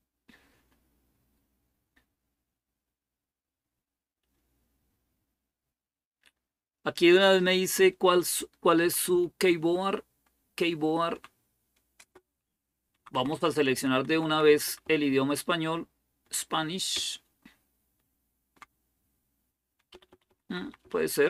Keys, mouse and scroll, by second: 8.6 Down, 8.8 Down, 9.5-10.9 Down, 11.8 Down, 11.8 Return, 12.8 Down, 13.0 Down, 13.1 Down, 13.3 Down, 13.5 Down, 13.9 Down, 14.1 Down, 14.3 Down, 14.4 Down, 14.6 Down, 15.3 Down, 15.3 Down, 15.5 Down, 15.6 Down, 15.7 Down, 15.9 Down, 16.0 Down, 16.2 Down, 16.2 Down, 16.7-18.3 Down, 18.6 Down, 19.7 Home, 20.1 Up, 20.2 Up, 20.4 Up, 20.6 Up, 20.8 Up.